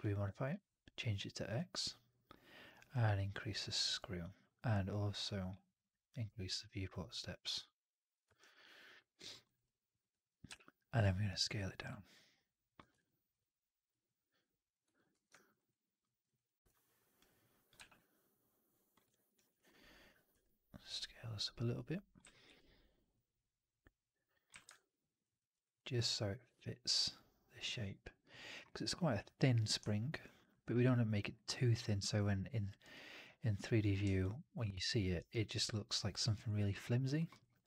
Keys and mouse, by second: 2.9-8.1 drag, 8.3 alt+right drag, 8.5-9.1 alt+drag, 9.2 alt+middle drag, 9.3 alt+right drag, 9.5-12.6 alt+drag, 12.7 w, 12.9 alt+click, 15.0 f, 15.2 alt+drag, 15.4 alt+right drag, 15.9 middle drag, 16.1 right click, 16.3 click, 17.6 r, 19.2 right click, 19.4 1, 20.2 r, 22.1 w, 22.4 4, 24.4 w, 24.6-25.1 alt+drag, 25.3 alt+middle drag, 25.4 right click, 25.6-26.2 drag, 27.4 click, 30.3 alt+click, 30.7-31.1 alt+drag, 31.2 alt+right drag, 31.4-32.7 alt+drag, 32.7 alt+right drag, 33.7 click, 34.1-34.8 alt+drag, 34.9 alt+middle drag, 35.0 alt+right drag, 35.3-36.1 alt+drag, 36.2 alt+right drag, 36.6-36.9 alt+drag, 37.1 alt+middle drag, 37.2 alt+right drag, 37.4-37.6 alt+drag.